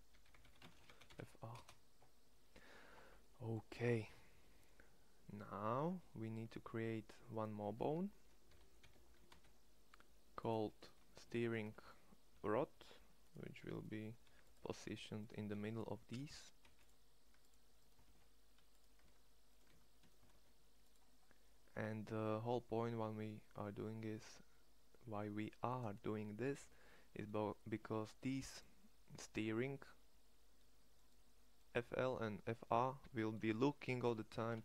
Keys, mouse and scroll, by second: 0.0-3.0 middle drag, 8.3 e, 12.3 alt+p, 13.9 g, 14.5 Tab, 15.5 Tab, 16.0 a, 16.5 c, 17.9 shift+s, 18.9 Tab, 19.5 Tab, 20.1 shift+s, 21.5 Tab, 27.6 Tab.